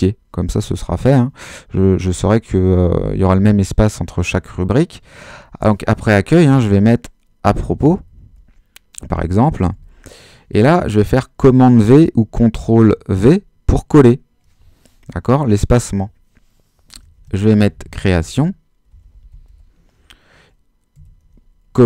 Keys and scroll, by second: 6.5-10.3 typing, 13.1 super+v, 16.9-21.0 typing, 21.7 super+v.